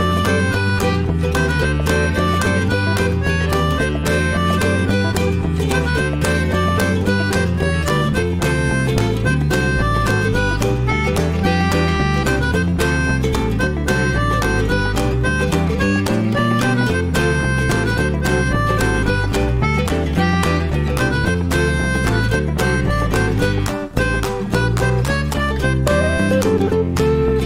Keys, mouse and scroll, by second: 15.8-16.2 scroll down 2, 16.2-17.0 middle drag, 17.0-17.4 scroll up 1, 17.4-21.1 middle drag, 21.7 scroll down 1, 21.9-23.2 middle drag, 23.2 click, 23.4 scroll down 1, 23.6-24.7 shift+middle drag, 24.7 click, 24.9-25.6 right drag, 25.6-26.8 middle drag, 26.8 click.